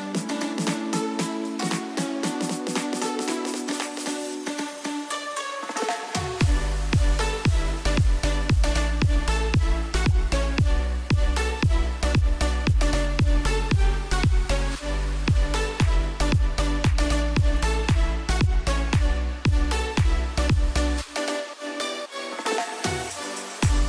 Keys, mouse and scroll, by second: 0.4-17.7 drag, 17.6 alt+Num_Lock, 17.7 alt+scroll up 1, 18.8 click, 20.1 Left.